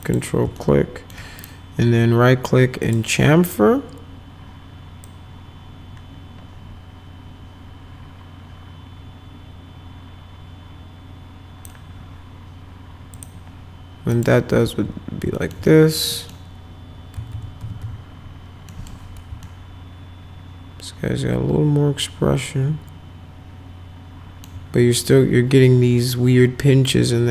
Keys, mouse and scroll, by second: 0.0 ctrl+click, 0.6 alt+middle click, 1.4 right click, 2.9 click, 5.1-11.7 drag, 13.1 click, 14.1 click, 15.4 alt+middle click, 15.7 middle click, 16.1 middle click, 17.2 F4, 17.3 F4, 17.6 F5, 17.8 F4, 18.7 middle click, 19.5-21.9 alt+middle drag, 21.9-24.4 alt+right drag.